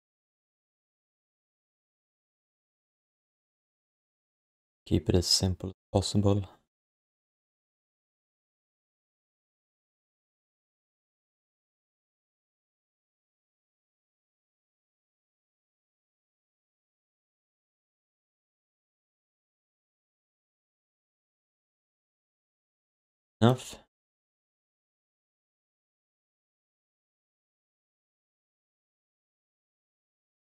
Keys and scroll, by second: 7.6 shift+BackSpace, 8.1 shift+Return, 13.4 shift+q, 14.3 alt+shift+d, 14.9 alt+shift+d, 15.5 alt+q, 15.9 alt+q, 20.2 alt+shift+d, 20.5 alt+q, 26.1 3, 27.8 1.